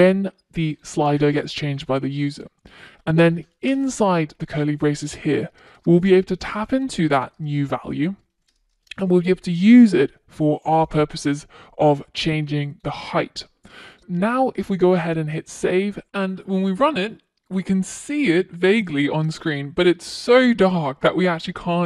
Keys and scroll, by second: 7.8 Return, 14.8 super+s.